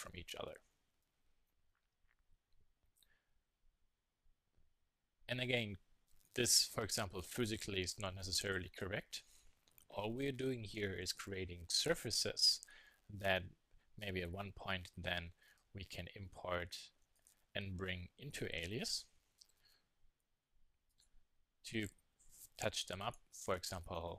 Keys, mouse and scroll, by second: 0.0 click, 1.0 z, 10.9-12.0 middle drag, 12.0 z, 18.6 e, 20.6 click, 21.3 click, 21.8 click, 22.1 click, 22.2 click, 22.9 e.